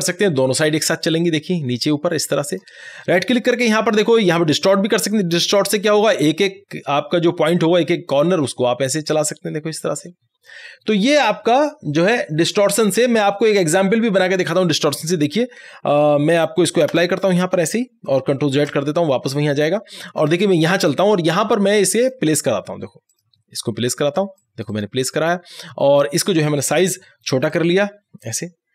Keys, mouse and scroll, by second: 3.1 right click, 4.7-13.1 drag, 17.0 Return, 20.1 ctrl+Tab, 22.0 click, 27.5 click, 27.6-28.7 drag.